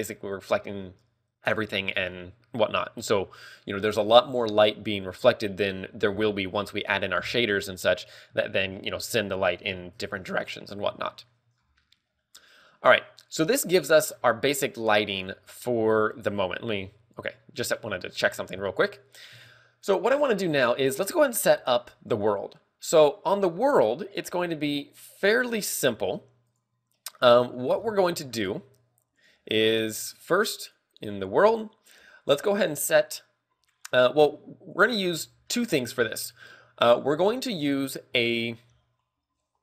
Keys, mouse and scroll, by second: 9.3 scroll up 9, 9.7 shift+middle click, 10.1 a, 10.5 ctrl+w, 11.0-11.6 scroll up 5, 11.6 ctrl+w, 11.6 shift+middle click, 12.0 scroll down 2, 12.6 scroll down 3, 12.7 middle click, 14.5 scroll down 6.